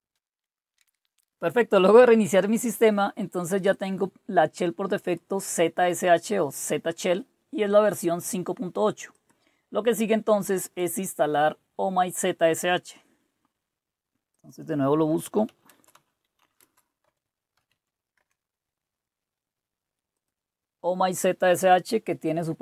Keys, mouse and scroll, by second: 1.1 click, 3.7-5.2 drag, 7.9 click, 9.1 click, 10.6 click, 14.3 click, 14.9-18.2 typing, 18.2 Return, 20.1 click, 21.3-22.5 typing.